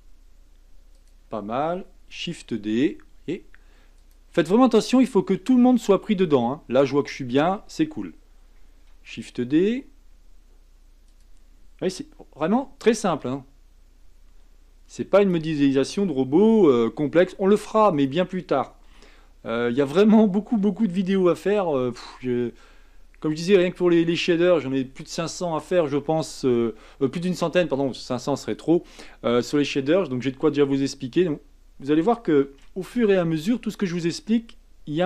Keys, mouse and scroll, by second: 2.2 shift+d, 8.9 shift+d, 13.2 s, 17.0 g, 18.9 s, 20.9 shift+d, 32.4 shift+d.